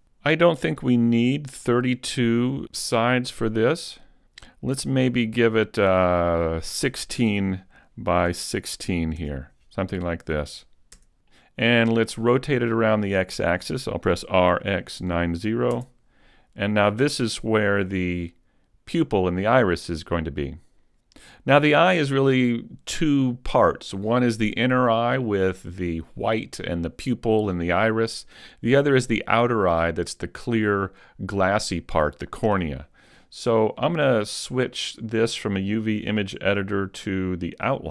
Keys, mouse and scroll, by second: 2.7 click, 6.3 click, 11.3-13.9 scroll down 2, 14.1 r, 35.0 click.